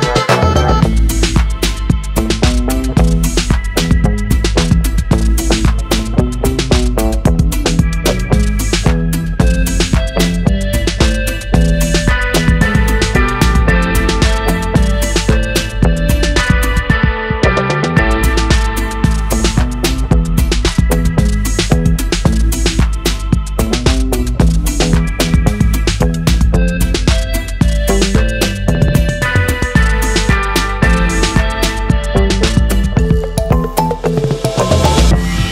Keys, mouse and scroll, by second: 1.4 shift+a, 5.8-6.2 shift+drag, 7.7 click, 8.1 click, 8.7 click, 9.3-11.0 drag, 13.4-15.2 drag, 16.9-17.2 shift+drag, 20.5 shift+a, 25.9-27.2 drag, 28.8 shift+middle click, 29.9 shift+click, 31.6 click, 32.0 click, 32.6 click, 33.1 drag, 33.5-35.1 drag.